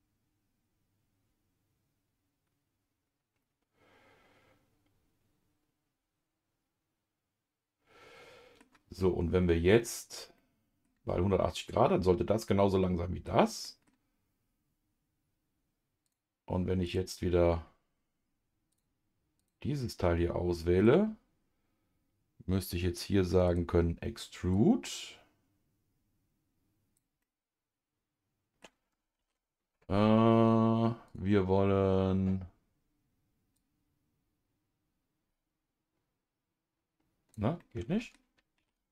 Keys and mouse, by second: 10.4 middle click, 12.8 middle click, 13.6 middle click, 16.0 click, 16.8 click, 18.7 click, 19.4 click, 19.9 middle click, 23.5 click, 24.5-27.0 drag, 27.2-28.6 middle drag, 29.2 ctrl+z, 31.1 click, 33.5-37.3 drag, 37.6 middle click, 38.6 ctrl+z.